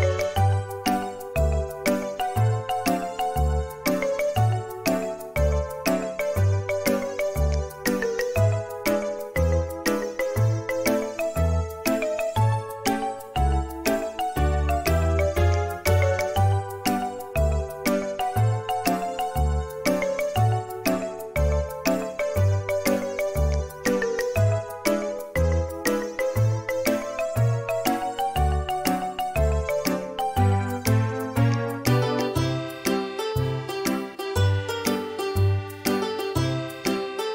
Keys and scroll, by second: 1.4 e, 2.3 space, 4.4 typing, 8.3-8.8 typing, 12.0 m, 14.8 space, 15.1 space, 18.0 Escape, 28.6 ctrl+z.